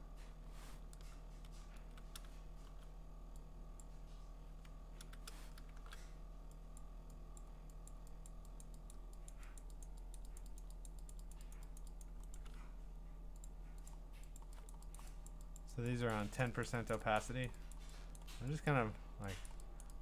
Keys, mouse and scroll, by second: 1.7 ctrl+z, 2.6 x, 3.8 click, 5.0 ctrl+z, 5.8 !, 6.8 click, 7.4 click, 7.9 click, 8.3 click, 8.6 click, 8.9 click, 9.3 click, 9.6 click, 9.8 click, 10.1 click, 10.4 click, 10.6 click, 10.9 click, 11.1 click, 11.3 click, 11.5 click, 11.8 click, 12.0 click, 12.3 right click, 13.4 click, 13.9 click, 14.4 click, 14.7 click, 15.0 click, 15.3 click, 15.6 click, 15.9 click, 16.1 click, 16.4 click, 16.7 click, 16.9 click, 17.2 click, 17.5 click, 17.7 click, 18.2 click, 18.7 click, 19.5 click, 19.8 click.